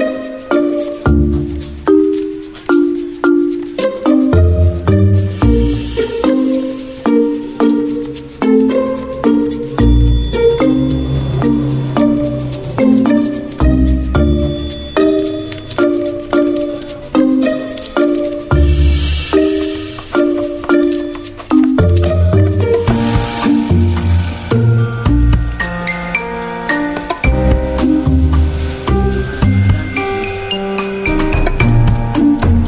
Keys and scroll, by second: 2.2-3.0 typing, 4.4 v, 7.4-9.5 typing, 13.6 ctrl+2, 18.0 space, 20.2-27.0 typing, 26.5 ctrl+a, 29.1 ctrl+t, 30.4-31.7 typing.